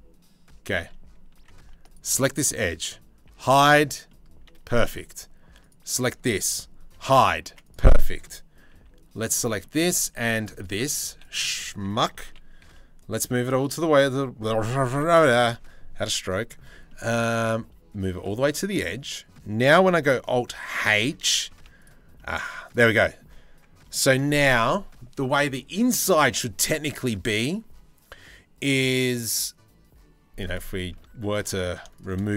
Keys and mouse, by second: 0.9 1, 1.5 alt+click, 2.8 h, 3.7 click, 5.2 alt+click, 6.5 h, 7.0 1, 7.2 right click, 8.3 c, 9.2 shift+middle click, 9.6 c, 10.6 c, 11.7 g, 13.3 z, 14.5 KP_3, 14.9 KP_1, 15.2 z, 17.7 z, 20.3 alt+h, 21.2 Tab, 21.7 middle click, 22.6 middle click, 30.1 click, 30.5 Tab, 30.9 middle click, 31.5 shift+middle click.